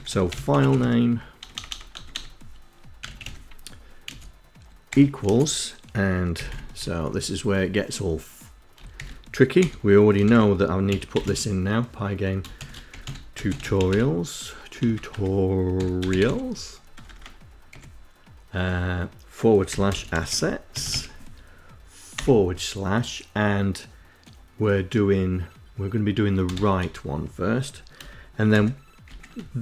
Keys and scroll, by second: 0.0-4.6 typing, 5.8 ', 6.2 Left, 8.3-17.0 typing, 18.7-21.4 typing, 25.8 shift+r, 27.8 shift+[, 28.3 shift+].